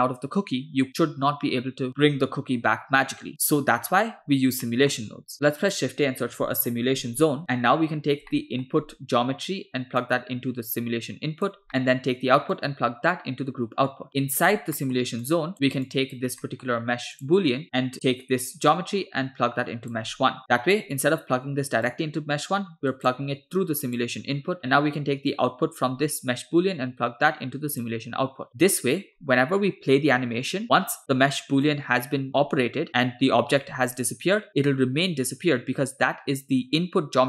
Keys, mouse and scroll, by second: 2.5 g, 4.2 scroll down 2, 4.7 middle click, 5.3 shift+a, 8.3 middle click, 8.9 scroll up 1, 10.0-11.6 drag, 11.7 middle click, 12.6-14.6 drag, 14.8 middle click, 15.3 click, 15.9 click, 16.5-16.8 middle drag, 17.2 drag, 17.7 click, 18.0-20.0 drag, 20.4-20.8 drag, 21.9-23.1 drag, 23.9 click, 25.4-28.1 drag.